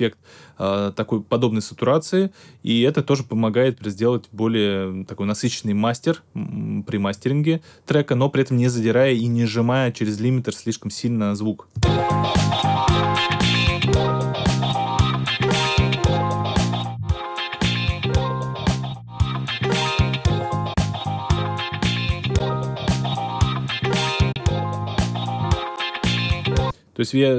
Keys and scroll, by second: 11.7 space, 26.5 space.